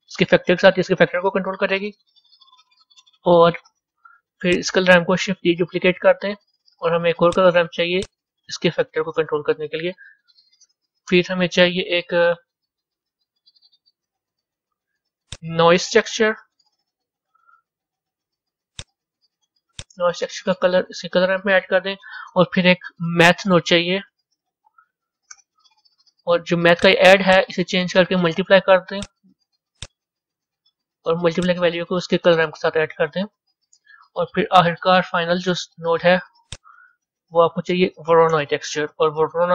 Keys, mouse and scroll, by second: 0.6-2.6 drag, 4.5 click, 5.2 shift+d, 9.2 click, 11.4-19.2 middle drag, 20.8-22.9 drag, 23.0 shift+a, 27.4-34.2 drag, 34.2-39.5 middle drag.